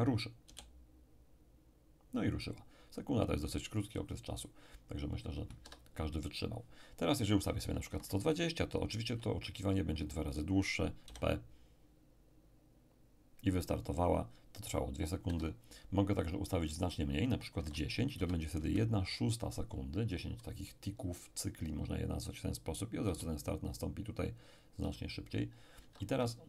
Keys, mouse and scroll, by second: 0.4 p, 5.6 Escape, 7.5 click, 7.9 1, 8.5 2, 9.0 0, 9.7 click, 11.1 p, 15.3 Escape, 16.7 click, 17.6 1, 18.2 0, 18.6 Return, 23.1 p, 24.8 p, 25.8 Escape.